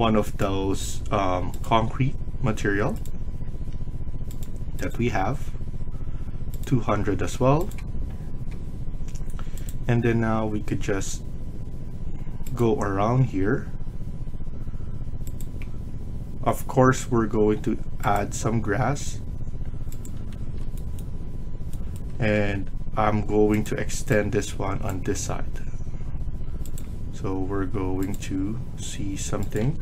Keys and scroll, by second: 20.3 Escape, 22.1 Escape, 29.5 Escape, 29.7 Escape.